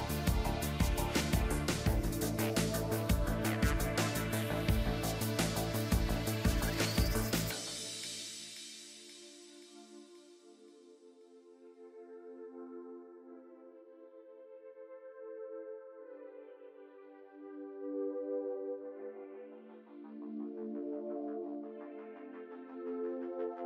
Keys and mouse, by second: 3.3 KP_3, 5.3 f, 5.9 ctrl+s, 8.5 a, 9.6 ctrl+s, 11.0 KP_3, 11.4 ctrl+s, 14.9 ctrl+s, 15.6-17.6 drag, 17.9 b, 18.9 e, 21.3-23.4 drag, 22.2 KP_1, 23.5 a.